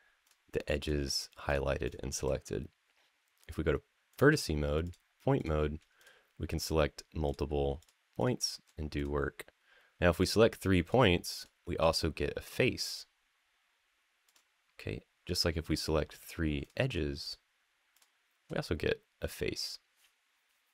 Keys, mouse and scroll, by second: 0.0 shift+click, 0.6 shift+click, 1.2 shift+click, 1.6 shift+click, 3.9 click, 4.6 click, 5.1 click, 5.7 shift+click, 6.3 shift+click, 7.0 shift+click, 7.6 shift+click, 7.9 shift+click, 8.7 click, 9.9 click, 10.6 shift+click, 11.2 shift+click, 14.0 click, 15.2 click, 15.6 click, 16.4 click, 17.0 shift+click, 17.7 shift+click.